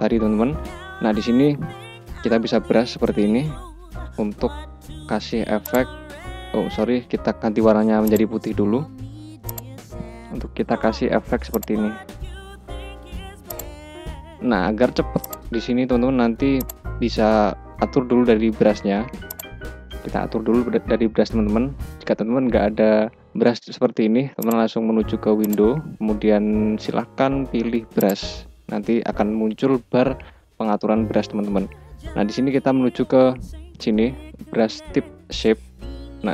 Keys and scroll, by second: 2.8 [, 6.9 ], 10.2 [, 12.4 ], 14.4 [, 15.6 ].